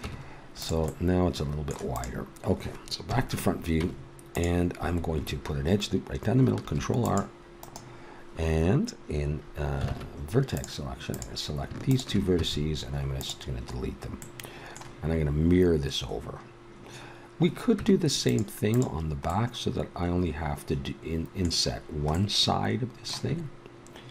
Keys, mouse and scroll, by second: 0.0 Tab, 3.1 KP_1, 3.8 Tab, 6.6 ctrl+r, 9.9 ctrl+Tab, 12.4 x, 13.8 middle click, 17.8 Tab, 18.7-20.4 right drag, 22.2-23.6 middle drag.